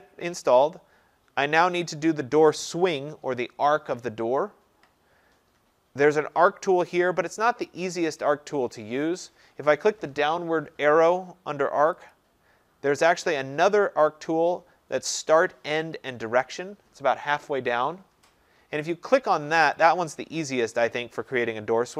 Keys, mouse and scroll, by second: 12.2-17.2 drag, 19.8-21.9 drag.